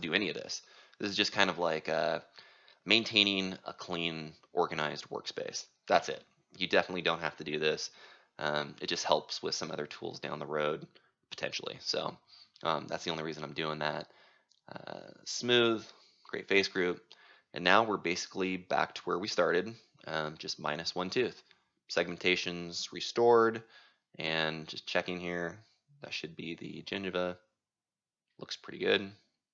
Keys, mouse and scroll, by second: 0.0 right click, 0.8-4.2 drag, 4.2 o, 4.6 o, 5.2 middle click, 6.2 middle click, 6.7 o, 8.5-10.4 right drag, 10.4-13.0 drag, 14.5-17.8 drag, 17.8-19.7 typing, 20.3 right click, 20.5-23.0 middle drag, 20.5-22.0 scroll, 22.9 scroll, 23.0 right click, 23.7-24.9 drag, 24.9 middle click, 24.9-25.3 scroll, 27.2 middle click, 27.2-29.5 scroll, 28.2-29.5 middle drag.